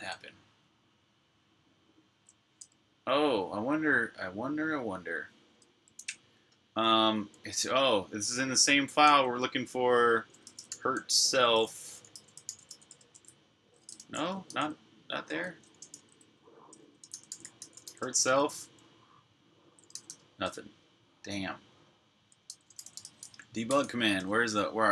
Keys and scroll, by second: 1.9 super+q, 3.1 typing, 8.8 f, 10.0-15.3 typing, 13.8 super+f, 15.7 shift+super+f, 16.5-18.2 typing, 19.5-20.2 typing, 22.1-24.2 typing.